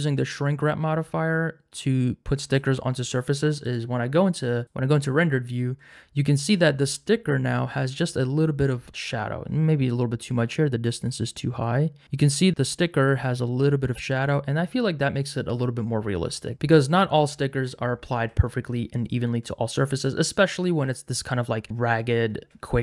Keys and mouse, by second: 3.7 click, 4.6 click, 11.1 shift+click, 16.5 Tab, 16.5 z, 20.0 click.